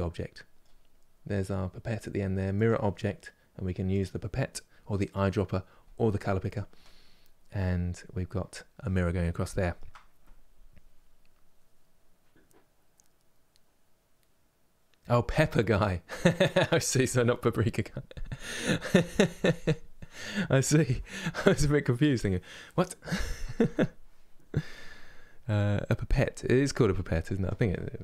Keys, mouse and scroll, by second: 2.3 click, 3.8 click, 6.5-28.0 middle drag.